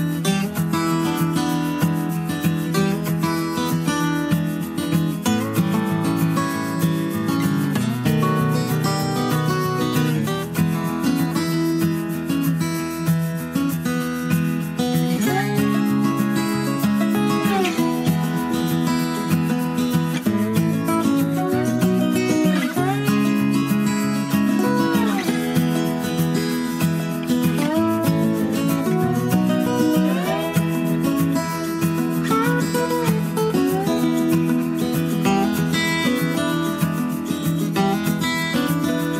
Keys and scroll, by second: 8.2 Escape, 31.2 Escape.